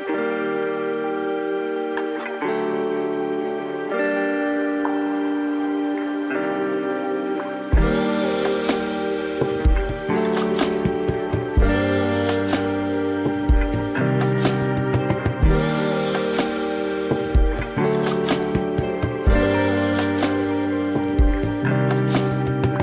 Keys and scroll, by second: 14.2 space.